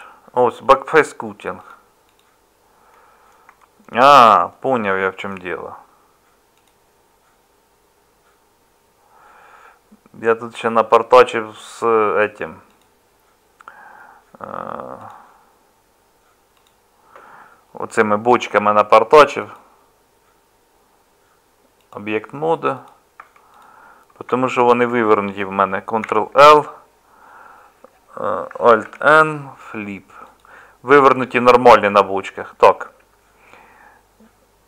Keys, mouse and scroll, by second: 3.9-23.2 middle drag, 23.2 Tab, 26.0 ctrl+l, 28.8 alt+n, 31.8 Tab.